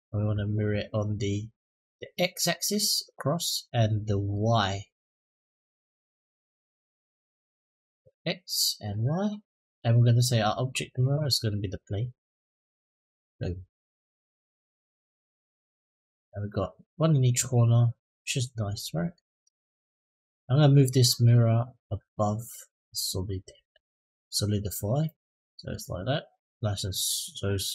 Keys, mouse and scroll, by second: 4.1 middle drag, 6.2 middle drag, 8.7 click, 12.1 click, 13.5-18.9 middle drag, 21.0-22.7 drag, 24.8-25.5 middle drag, 25.8 click, 26.9-27.6 middle drag.